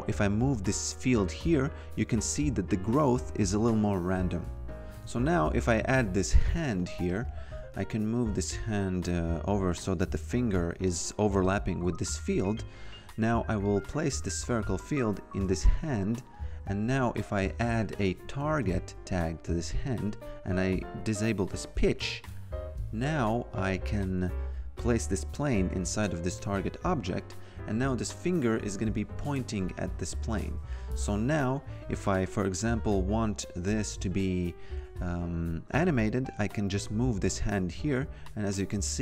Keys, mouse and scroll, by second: 4.5 click, 4.9 ctrl+v, 7.0 click, 10.2 click, 12.6 F2, 13.8 click, 16.3 click, 17.3-19.1 typing, 19.4 click, 21.4 click, 24.7 click, 27.9 click, 33.1 click, 34.0 f, 35.2 click.